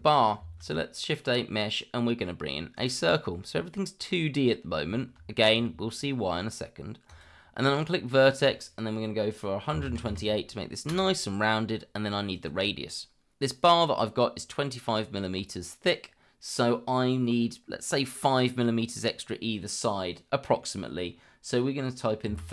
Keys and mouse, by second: 0.4 shift+a, 5.3 shift+middle drag, 7.1-10.9 drag, 12.3-22.5 drag.